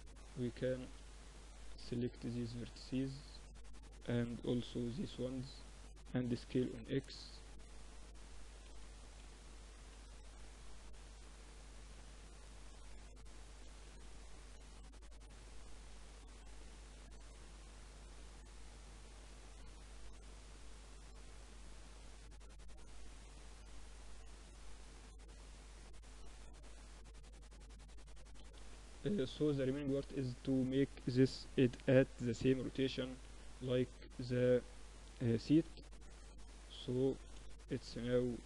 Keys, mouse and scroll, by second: 0.7 b, 0.9 click, 3.6 c, 5.3 s, 6.6 Tab, 6.9-8.7 drag, 7.0 Tab, 7.6 a, 7.7 a, 8.2 a, 8.9 b, 10.4-12.3 drag, 12.6 z, 13.0 Tab, 13.2 middle click, 14.8 Tab, 15.4 a, 15.7 a, 16.1 a, 17.1 middle click, 18.2 a, 18.3 click, 18.9 click, 19.1 z, 20.5 click, 21.4 Tab, 22.1 Tab, 22.6 z, 22.9-24.7 drag, 24.5 Tab, 24.7-25.7 middle drag, 27.5 KP_3, 27.7 z, 30.6 r, 32.9-34.6 drag, 34.3 r, 36.3 z, 36.5-38.4 middle drag.